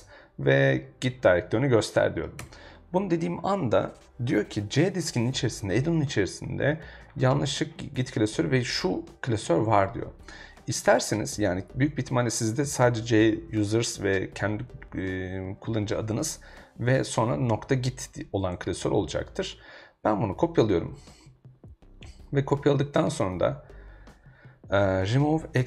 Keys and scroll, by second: 2.4 Return, 24.7-25.6 typing.